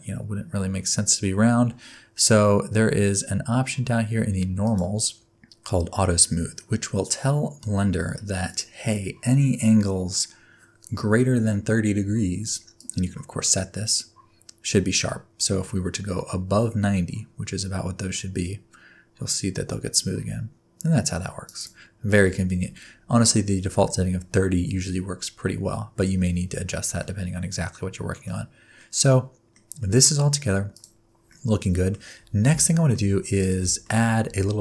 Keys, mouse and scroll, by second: 4.6 click, 8.5 click, 12.7 click, 24.9-27.0 scroll down 7, 27.0 middle click, 28.3 scroll down 2, 28.7 middle click, 29.8 middle click, 30.7 click, 31.0-31.3 scroll down 1, 31.3 middle click, 31.9-32.5 scroll down 1, 32.6 shift+middle click, 33.1 scroll up 1, 33.3 scroll down 2, 33.8 shift+middle click, 34.3 scroll up 1, 34.5 scroll down 2.